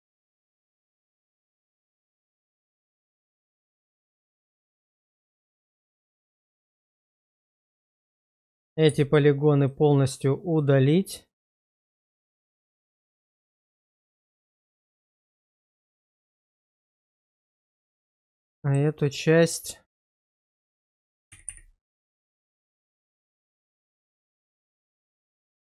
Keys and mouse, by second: 2.8-3.8 middle drag, 5.4-8.2 middle drag, 8.9 x, 10.6-14.4 middle drag, 14.7 Tab, 15.5 alt+click, 15.7 alt+click, 16.4-17.8 middle drag, 18.4 shift+middle click, 21.5 g, 21.7 g.